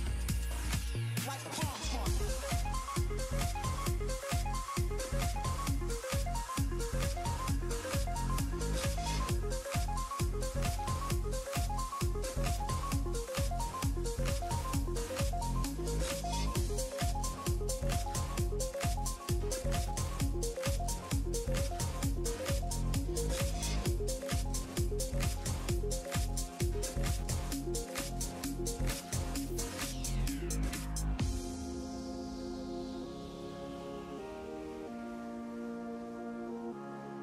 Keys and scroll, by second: 10.6 s, 11.0 s.